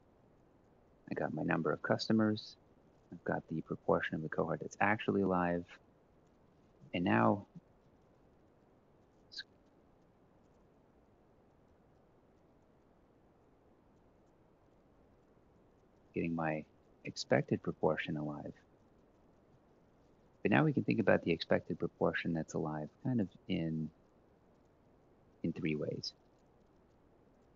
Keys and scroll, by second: 0.0-4.9 typing, 6.3 Up, 6.6 shift+Right, 6.9-9.6 typing, 14.6-19.9 typing, 20.7 Return, 21.1 Up.